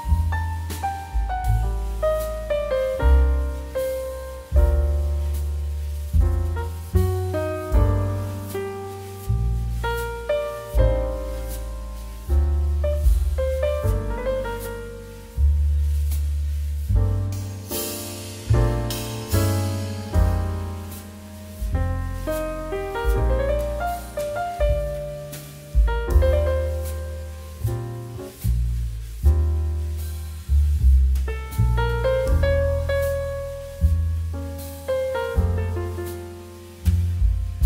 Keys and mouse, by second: 0.1 middle click, 0.8 1, 1.1 click, 2.0 middle click, 2.5 g, 3.4 click, 3.5 middle click, 4.1 shift+middle click, 4.4 click, 5.0 2, 5.1 click, 5.6 shift+click, 6.4 ctrl+n, 7.0 middle click, 7.6 n, 8.2 shift+a, 9.4 click, 15.0 click, 16.6 middle click, 16.9 s, 17.4 click, 17.5 g, 18.1 click, 18.3 middle click, 18.7 shift+middle click, 18.8 middle click, 19.0 shift+middle click, 19.2 middle click, 19.8 g, 20.7 click, 20.8 middle click, 21.0 shift+middle click, 21.7 g, 22.7 click, 22.8 middle click, 23.4 g, 23.8 shift+z, 24.4 click, 24.5 middle click, 25.3 r, 26.2 click, 26.4 g, 26.6 shift+z, 27.1 click, 27.6 shift+d, 28.4 shift+z, 29.0 click, 29.5 s, 30.1 click, 30.2 middle click, 30.7 g, 31.5 click, 31.6 middle click, 31.9 shift+middle click, 32.0 middle click, 33.8 shift+d, 34.4 shift+z, 35.6 click, 36.2 shift+click, 37.1-37.6 typing.